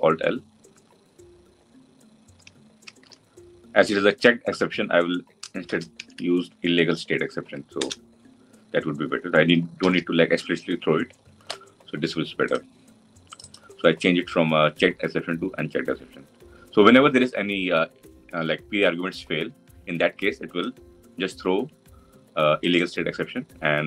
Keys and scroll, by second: 7.7 Return, 9.6 ctrl+alt+l.